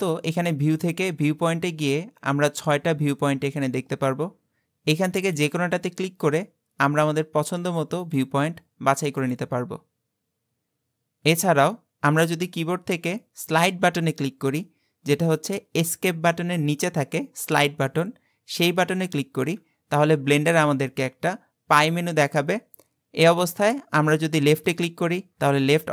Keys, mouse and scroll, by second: 0.0-3.2 drag, 6.2-10.6 drag, 19.5 `.